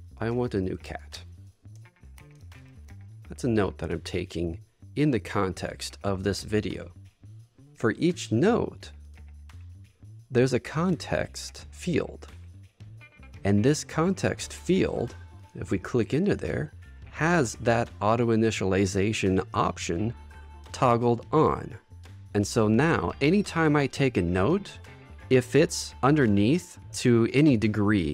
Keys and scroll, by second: 0.4 space, 2.3 shift+3, 3.9 Return.